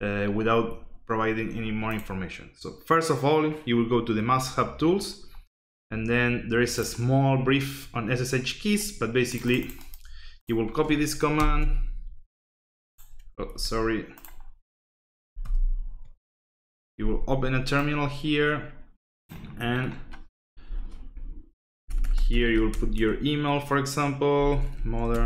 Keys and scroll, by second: 11.3 ctrl+alt+t, 13.5 ctrl+d, 15.4 ctrl+alt+t, 20.6 Left, 20.9-22.7 typing, 24.1-25.2 typing.